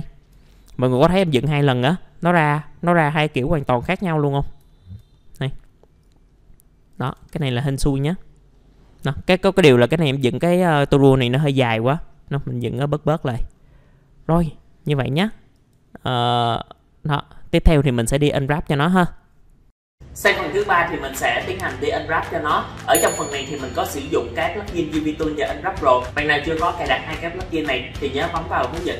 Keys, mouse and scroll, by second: 0.0 alt+middle click, 2.0 middle click, 4.7 alt+middle click, 6.0 click, 6.8-7.8 typing, 7.6-8.0 scroll down 1, 8.0-8.5 scroll up 2, 8.0 middle click, 8.5 middle click, 8.9-9.5 scroll up 1, 9.5-10.7 scroll down 1, 13.0 click, 13.5 scroll up 1, 13.8 scroll down 1, 13.8 middle click, 14.5 scroll down 1, 14.8 middle click, 15.5 click, 16.1-17.7 scroll up 1, 17.7-18.1 scroll down 1, 18.1 middle click, 18.4 scroll down 1.